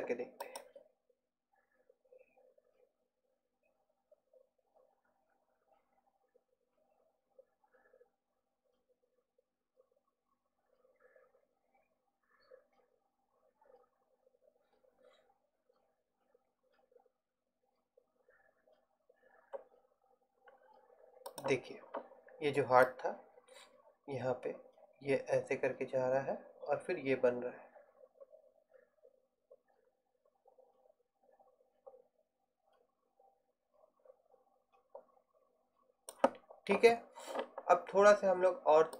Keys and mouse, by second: 0.5-2.7 drag, 21.9-24.9 drag.